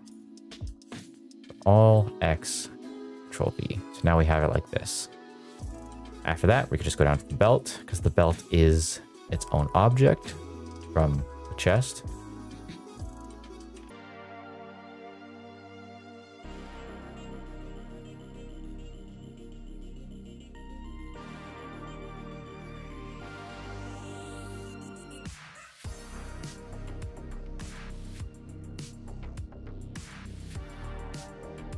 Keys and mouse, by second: 0.6 ctrl+z, 0.7 a, 1.2 a, 2.0 x, 2.6 ctrl+v, 3.0 g, 3.9 middle click, 4.2 shift+middle drag, 5.3 middle click, 5.6 shift+middle drag, 6.2 click, 7.4 middle click, 10.5 click, 12.9 middle click, 13.3 middle click, 13.7 middle click, 13.9 click, 14.0 middle click, 14.2 ctrl+c, 14.3 click, 14.5 ctrl+v, 14.6 ctrl+z, 14.8 middle click, 15.0 ctrl+v, 15.1 ctrl+v, 15.1 middle click, 15.2 click, 15.3 BackSpace, 15.6 click, 15.8 shift+middle click, 15.9 shift+middle click, 16.0 shift+middle click, 16.1 middle click, 16.3 click, 16.5 middle click, 16.5 middle click, 16.6 click, 16.7 ctrl+c, 16.8 middle click, 16.9 middle click, 17.1 ctrl+v, 17.2 click, 17.5 middle click, 17.6 middle click, 17.7 ctrl+v, 17.8 ctrl+v, 17.9 ctrl+v, 18.0 click, 18.3 middle click, 18.6 middle click, 19.1 middle click, 19.5 middle click, 19.6 middle click, 19.7 middle click, 19.9 ctrl+c, 20.3 ctrl+v, 20.3 middle click, 20.4 click, 20.6 shift+middle click, 20.8 click, 21.0 click, 21.2 middle click, 21.3 middle click, 21.3 middle click, 21.5 middle click, 21.5 middle click, 21.6 click, 21.9 h, 22.1 click, 22.4 middle click, 22.5 middle click, 22.7 ctrl+v, 22.8 ctrl+v, 22.9 ctrl+v, 23.0 click, 23.1 middle click, 23.2 click, 23.4 middle click, 23.6 ctrl+c, 23.8 middle click, 24.0 ctrl+v, 24.0 middle click, 24.1 click, 24.4 middle click, 24.5 middle click, 24.6 middle click, 24.7 click, 24.8 middle click, 25.0 ctrl+v, 25.1 ctrl+v, 25.1 click, 25.4 middle click, 25.6 middle click, 25.6 middle click, 25.7 middle click, 25.8 middle click, 26.0 ctrl+v, 26.1 ctrl+v, 26.2 click, 26.4 middle click, 26.5 middle click, 26.7 click, 27.0 ctrl+c, 27.0 click, 27.2 ctrl+v, 27.3 click, 27.6 middle click, 27.8 middle click, 27.8 click, 27.9 middle click, 27.9 g, 28.0 Escape, 28.2 middle click, 28.2 middle click, 28.4 click, 28.8 ctrl+v, 28.9 ctrl+v, 29.1 click, 29.3 middle click, 29.4 click, 29.5 click, 29.6 middle click, 29.7 middle click, 29.8 ctrl+c, 29.9 click, 30.2 ctrl+v, 30.2 middle click, 30.3 middle click, 30.7 middle click, 30.7 middle click, 30.9 shift+middle click, 31.2 ctrl+c, 31.3 ctrl+v, 31.4 ctrl+v, 31.5 click, 31.7 middle click, 31.7 middle click.